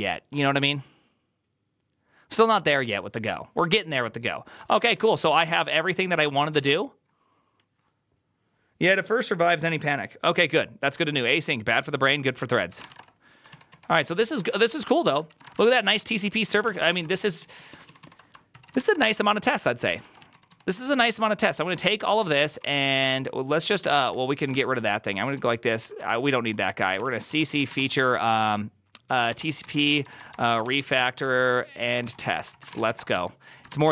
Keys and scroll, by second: 4.5-6.9 typing, 6.1 ctrl+c, 12.5-15.4 typing, 13.4 ctrl+u, 13.5 ctrl+u, 13.9 ctrl+c, 15.1 ctrl+c, 15.5 Return, 15.6 ctrl+d, 15.8 ctrl+d, 16.2 ctrl+d, 16.5-17.3 typing, 17.4 ctrl+u, 17.5 ctrl+u, 17.7 ctrl+u, 17.9 ctrl+u, 18.4 ctrl+c, 18.4-20.7 typing, 21.9-33.9 typing, 24.4 ctrl+c.